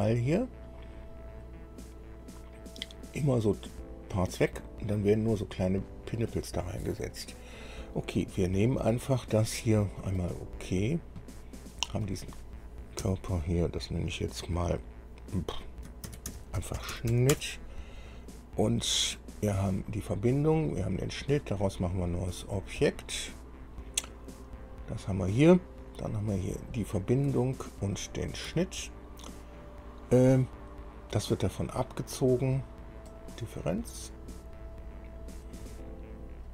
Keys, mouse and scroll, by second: 9.1 click, 10.4 click, 12.2 click, 13.2 F2, 16.2-17.3 typing, 17.5 Return, 18.9 scroll down 2, 19.9 click, 20.9 click, 23.0 click, 24.7-25.0 scroll down 2, 26.7 click, 28.2 ctrl+click, 33.3 click.